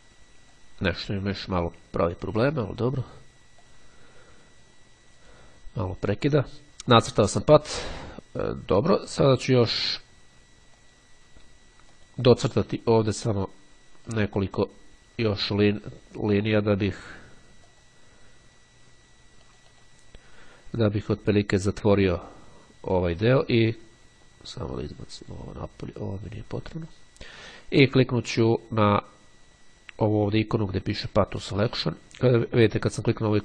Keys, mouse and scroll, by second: 1.3-1.9 scroll up 2, 2.2-2.7 ctrl+scroll down 2, 2.7-3.2 ctrl+scroll up 3, 3.7-5.9 drag, 10.9 click, 12.1 click, 13.3 click, 14.1 click, 16.4 click, 17.9 click, 19.7 click, 24.9-26.0 drag, 26.5-27.5 drag.